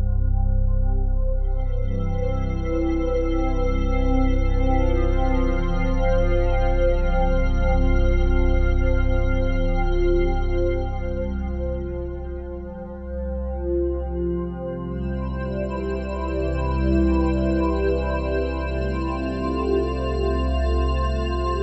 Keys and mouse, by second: 0.0-21.6 typing.